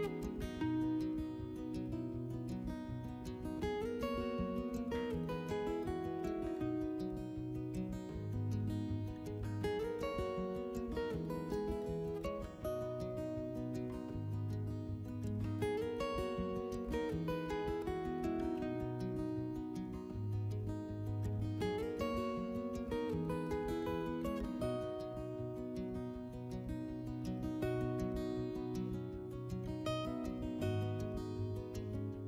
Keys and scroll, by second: 0.3 s, 4.4 s, 6.1 s, 10.7-12.1 typing, 13.7 ctrl+z, 14.5 4, 19.3 3, 21.1 5, 22.6 s, 23.8 s, 26.0-26.9 typing.